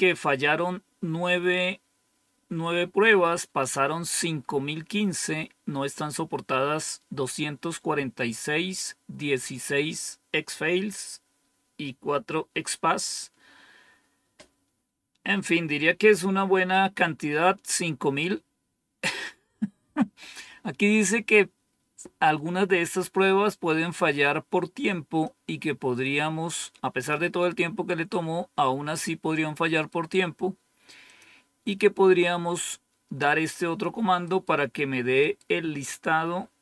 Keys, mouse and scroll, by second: 16.6 click, 25.1-27.0 drag, 31.0 click.